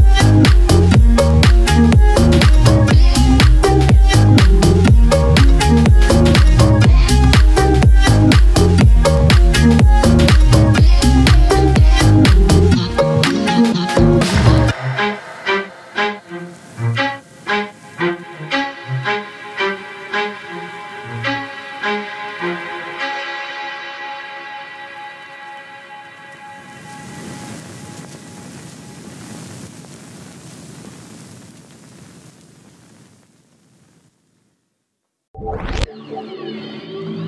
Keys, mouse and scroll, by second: 1.9-3.9 drag, 4.8 scroll down 1, 5.5 scroll up 1, 6.0-10.0 drag, 10.7 scroll down 1, 11.4 scroll up 1, 11.8 ctrl+z, 13.2-17.1 drag, 17.1 Down, 18.3 ctrl+click, 18.9 scroll down 1, 19.7-20.0 scroll up 1, 20.5 click, 21.0 ctrl+click, 22.9 ctrl+right click, 24.1 click, 25.1 scroll up 1, 25.5-26.9 drag, 26.9-29.6 ctrl+drag, 30.6 ctrl+z, 31.1 click, 32.1 scroll down 1, 32.9 scroll up 1, 34.3 ctrl+x, 34.9 click, 35.2 ctrl+click, 36.7 ctrl+v.